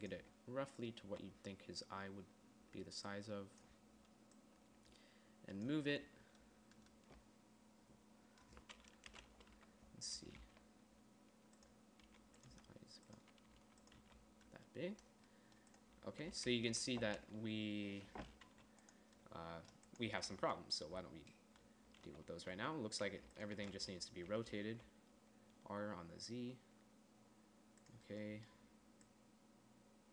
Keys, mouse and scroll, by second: 0.6 z, 1.4 z, 6.2 z, 6.4 z, 9.5 KP_1, 10.0 z, 10.9 g, 12.5 s, 12.9 g, 14.0 s, 14.4 z, 16.6 z, 17.0 KP_1, 17.3 z, 17.6 z, 18.9 z, 20.8 Tab, 22.4 z, 23.0 z, 24.9 r, 29.5-30.1 drag.